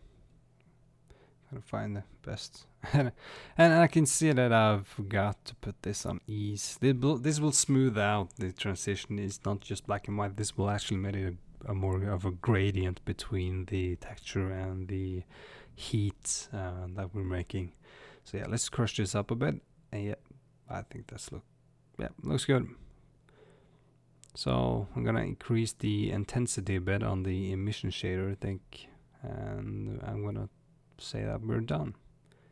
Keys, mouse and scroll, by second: 25.3-25.8 scroll down 2, 25.8-29.7 middle drag, 29.7 scroll up 2, 31.0-32.5 drag.